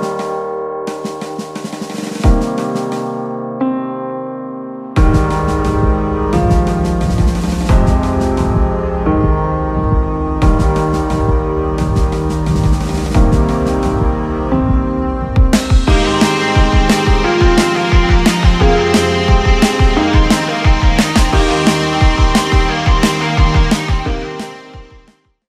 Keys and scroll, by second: 1.6 Escape, 4.9 Up, 5.2 Up, 5.5 Down, 7.2 Up, 7.4 Down, 8.3 ctrl+s, 17.1 alt+v, 17.5 ctrl+s, 18.2 ctrl+c, 19.1 ctrl+v, 22.1 ctrl+s, 22.8 ctrl+a.